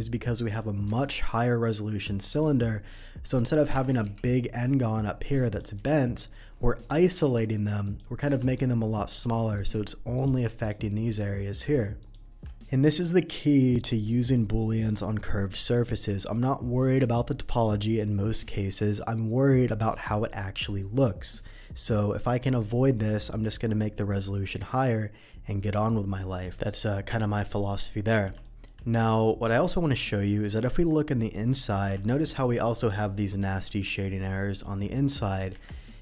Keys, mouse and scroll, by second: 0.9 Tab, 1.7 middle click, 3.7 alt+a, 4.2 alt+a, 4.2-5.5 drag, 5.8 Escape, 7.2 alt+a, 7.8 click, 9.0 shift+click, 9.5 shift+click, 10.1 shift+click, 10.6 shift+click, 11.1 shift+click, 11.5 shift+click, 12.0 shift+click, 26.7 middle click, 27.5 middle click, 28.4 shift+middle click, 29.1 shift+middle click, 30.2 shift+middle click, 30.7 Tab, 32.0 shift+middle click, 34.4 shift+middle click, 35.6 Tab, 35.8 middle click.